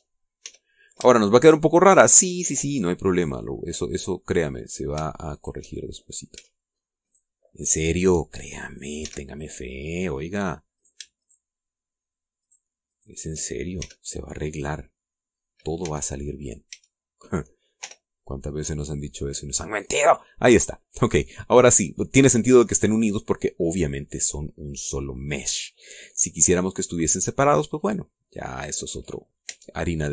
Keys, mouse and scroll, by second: 0.6 shift+right click, 1.4 f, 2.2 shift+middle click, 2.7 shift+scroll down 2, 3.1-5.4 middle drag, 5.7 right click, 6.4 shift+right click, 6.8 shift+middle click, 8.0 shift+right click, 8.8 shift+right click, 10.0 f, 10.4 middle click, 11.8 shift+right click, 12.2 shift+right click, 13.4 shift+right click, 13.9 shift+right click, 14.8 shift+f, 15.3 scroll down 2, 15.7-16.8 drag, 16.8 a, 17.2-17.6 scroll down 1, 17.7 a, 18.8 u, 19.8 click, 22.4 middle click.